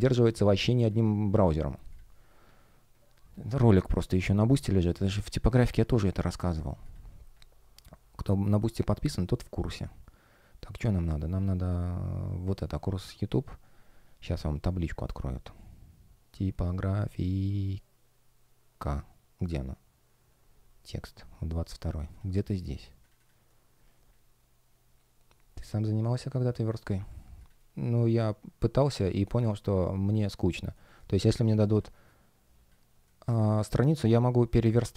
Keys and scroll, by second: 27.5 space, 30.6 space.